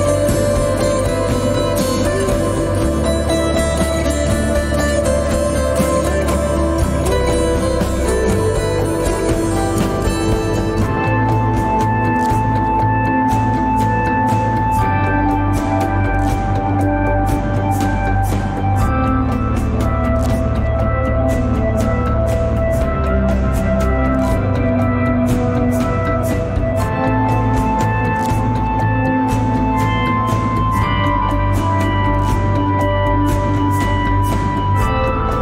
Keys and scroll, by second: 4.7 g, 15.1 g, 20.5 s, 26.0 g, 26.4 z, 34.5 s, 34.9 y.